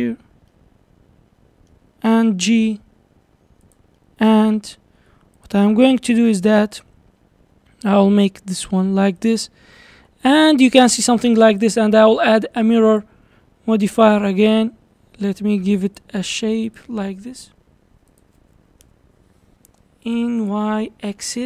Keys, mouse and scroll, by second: 0.5-2.3 middle drag, 2.3 g, 4.0-4.5 middle drag, 4.5-5.0 scroll up 1, 5.0 Tab, 5.4 click, 6.1 3, 6.3 click, 7.7 s, 10.0 Tab, 13.0 click, 14.4 click, 15.9 click, 18.1 click, 20.1 click, 20.4 click.